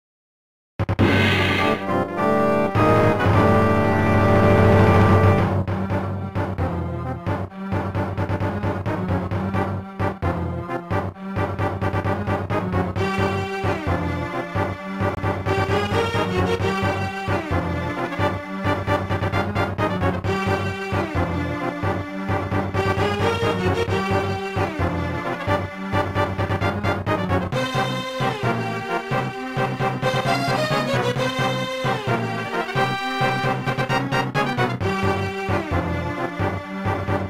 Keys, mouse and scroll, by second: 12.9 click, 13.9-15.0 typing, 16.0 Return, 23.5 scroll up 1, 24.4 click, 24.5 click, 25.3 click, 25.4 click, 26.0-26.4 typing, 26.6 Return, 33.2 ctrl+s, 33.5 click, 35.8 click, 36.6 1, 36.9 Return.